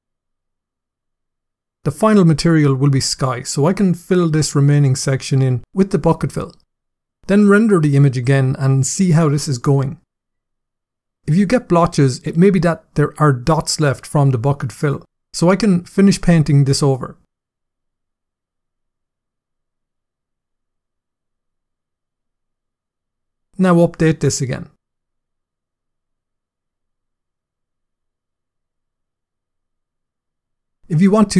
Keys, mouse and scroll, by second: 3.6 click, 4.9 click, 7.2 click, 14.3 click, 16.0 click, 17.6 click, 22.0 click, 22.6 click, 23.7 click, 26.1 click, 27.9 click, 31.0-31.3 scroll down 6.